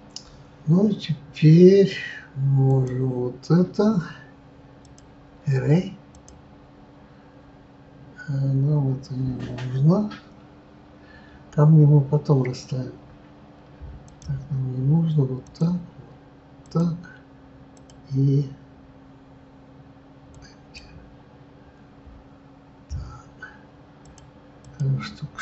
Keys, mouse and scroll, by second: 2.6 click, 6.1-20.7 drag, 24.1-25.4 drag.